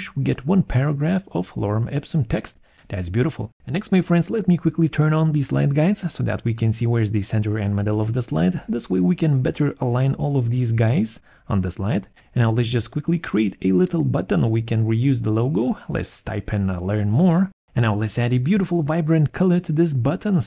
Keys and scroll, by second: 3.0 Return, 15.6-16.9 typing, 19.9 alt+4.